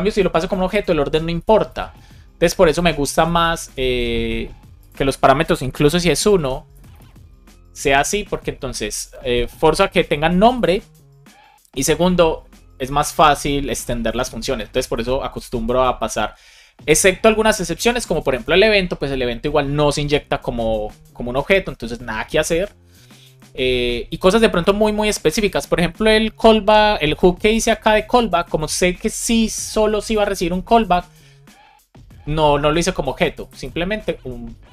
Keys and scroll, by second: 1.3 super+z, 1.8 super+z, 3.6 super+c, 5.7 shift+[, 6.0 space, 6.3 super+v, 6.6 space, 6.9 super+s.